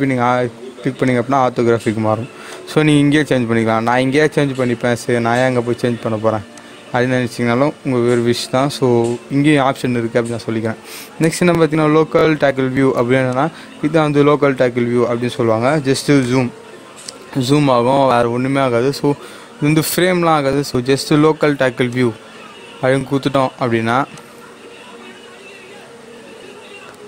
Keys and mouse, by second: 6.5 click, 6.5 click, 13.3 click, 16.2-21.8 drag, 21.8-24.1 drag.